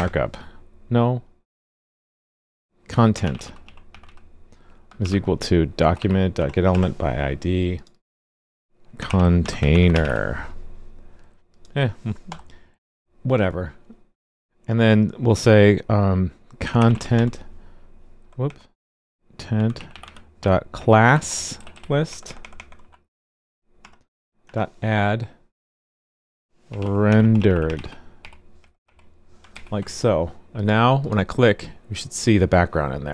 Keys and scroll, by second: 29.5 super+s.